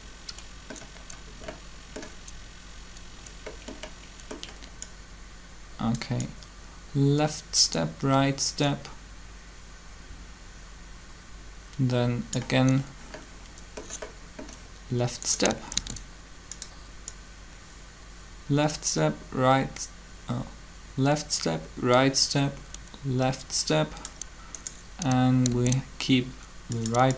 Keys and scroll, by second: 15.7 shift+d, 25.2 shift+d.